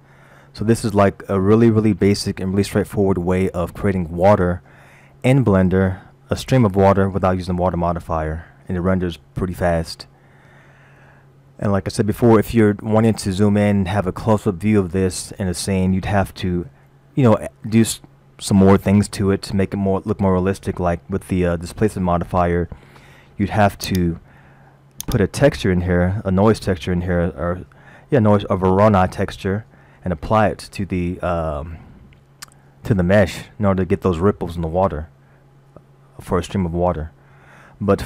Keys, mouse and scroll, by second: 1.0-2.7 scroll up 5, 2.7-3.3 scroll up 1, 3.7-4.6 scroll up 2, 8.3 scroll up 1, 13.8 scroll up 1, 22.6-23.3 scroll down 4, 23.9 click, 25.0 click, 36.8-37.9 scroll down 2.